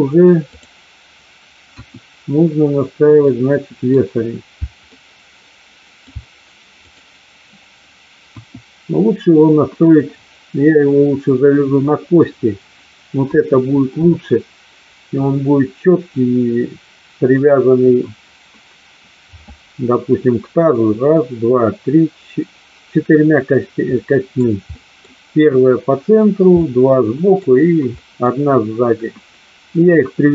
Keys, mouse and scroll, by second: 0.5 click, 1.6 KP_1, 3.3-3.9 middle drag, 4.5 e, 4.8-6.0 middle drag, 6.0 e, 8.3 KP_1, 24.0 middle click, 24.6 middle click, 26.6 middle click, 28.0 middle drag.